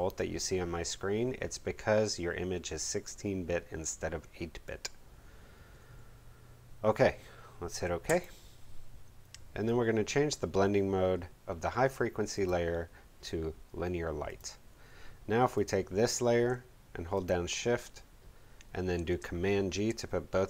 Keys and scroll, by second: 19.5 super+g.